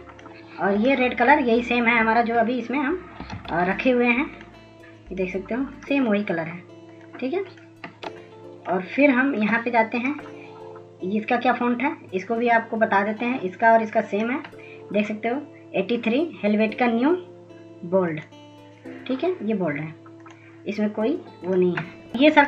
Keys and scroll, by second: 4.0 ctrl+a.